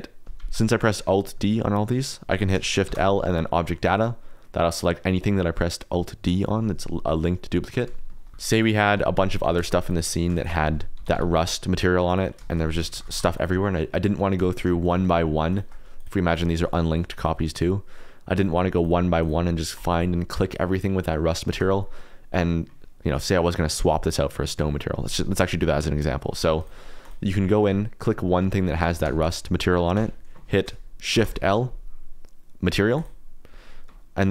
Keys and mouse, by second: 2.8 shift+l, 5.4 click, 5.5 middle click, 8.1 shift+click, 8.2 shift+middle click, 8.3-9.6 typing, 10.3 shift+click, 10.9 ctrl+l, 12.0 click, 12.4 shift+d, 12.6 shift+z, 12.8 click, 12.9 shift+d, 13.1 shift+z, 14.3 click, 14.8 click, 15.5 shift+click, 15.9 click, 16.3 click, 16.9 shift+click, 17.1 shift+click, 17.5 shift+click, 18.3 shift+click, 18.7 shift+click, 19.2 shift+click, 19.7 shift+click, 20.9 shift+click, 21.4 shift+click, 21.9 middle click, 26.5 click, 27.0 click, 28.8 Tab, 29.0 3, 29.2 click, 29.9 Tab, 31.1 shift+l.